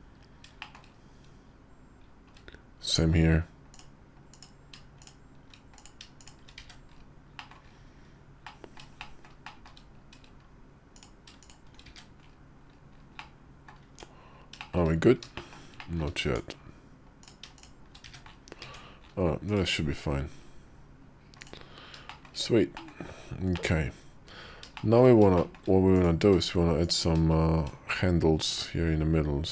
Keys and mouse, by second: 0.4 shift+middle click, 4.9 shift+right click, 6.0 shift+right click, 6.5 1, 7.3 middle click, 8.4 middle click, 8.9 middle click, 9.4 middle click, 11.7 1, 13.1 middle click, 13.7 Tab, 14.4 shift+middle click, 15.2 click, 15.6 click, 16.1 Tab, 17.9 1, 18.5 Tab, 19.3 /, 21.2 click, 21.9 shift+middle click, 22.6 middle click, 23.4 middle click, 24.6 shift+middle click, 25.2 shift+middle click, 26.1 q.